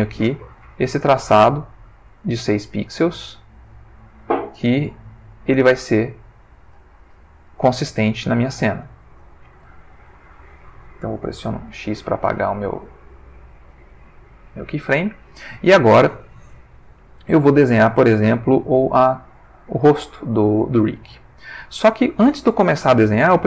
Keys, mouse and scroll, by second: 0.8-2.8 ctrl+middle drag, 3.1-4.3 ctrl+drag, 4.6 click, 5.7-7.9 drag, 8.2 ctrl+middle click, 10.0 Delete, 11.7 x, 14.0 click, 14.9 ctrl+middle click, 17.5-19.2 shift+middle drag, 20.0 shift+middle click, 20.7 ctrl+shift+middle click.